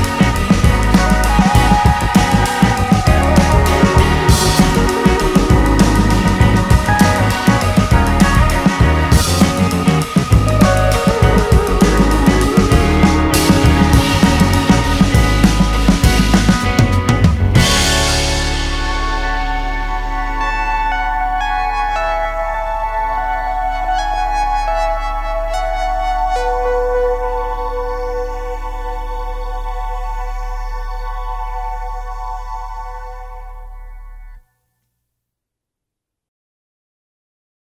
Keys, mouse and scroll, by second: 0.5 shift+click, 0.7-2.7 middle drag, 2.7-4.3 drag, 4.3-5.7 middle drag, 5.7 click, 6.3 middle click, 6.9 click, 7.5 middle click, 8.4-10.4 drag, 10.4 middle click, 11.0 scroll down 1, 11.2-12.3 shift+middle drag, 12.3 click, 12.7-14.1 shift+middle drag, 14.1 click, 14.2 shift+middle click, 15.2 click, 15.4 middle click, 15.8 g, 17.1 middle click, 17.7 click, 17.9 middle click, 18.3-19.4 drag, 19.4-20.4 middle drag, 21.0-23.1 drag, 23.1 middle click, 23.5 shift+click, 23.6-24.8 middle drag, 24.8-25.9 drag, 25.9 middle click, 26.2-28.0 drag, 28.0 middle click, 28.8 click, 29.7 middle click, 30.0 shift+click, 30.4-31.4 middle drag, 31.4 scroll down 1, 31.5 shift+middle click, 32.5 scroll down 1, 32.6-33.6 middle drag, 36.4-37.6 drag.